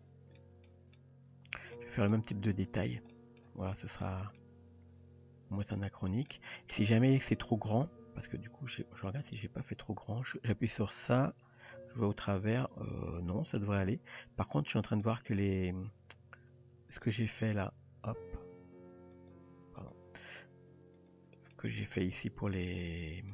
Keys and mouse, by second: 0.4-0.7 shift+middle drag, 1.0-1.6 middle drag, 2.1-2.5 middle drag, 3.1-3.4 shift+middle drag, 3.7 Tab, 4.4-6.4 middle drag, 8.3 KP_3, 11.1 click, 14.9 click, 17.1 click, 19.1 click, 19.8 drag, 21.0 click, 21.5-21.9 shift+middle drag, 22.4 Tab, 22.8-23.3 middle drag.